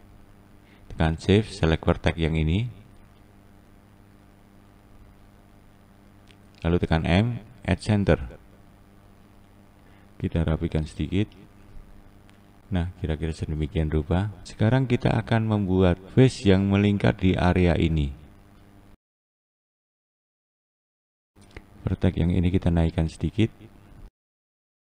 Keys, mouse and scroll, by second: 0.4 click, 7.5 m, 8.7 click, 10.2 click, 11.0 click, 13.7 scroll up 1, 13.9-14.6 scroll down 1, 14.6-15.7 scroll down 1, 15.7-18.1 scroll down 1, 18.1 click, 18.8 click, 19.2-20.4 scroll up 2, 20.4 click, 21.1-21.5 drag, 22.5 click, 23.4 click.